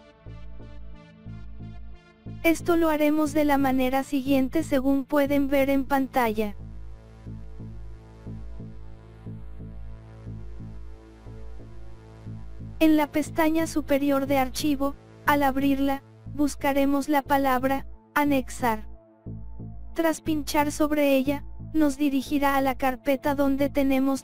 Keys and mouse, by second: 0.2 click, 0.9 click, 1.6-2.7 drag, 2.9 click, 3.5 click, 4.2 click, 4.8 click, 5.5-7.0 drag, 7.3 click, 8.3 click, 9.2-10.2 drag, 12.0-13.1 drag, 13.6 click, 15.5-16.7 drag, 18.6-20.5 drag, 21.0-22.9 drag.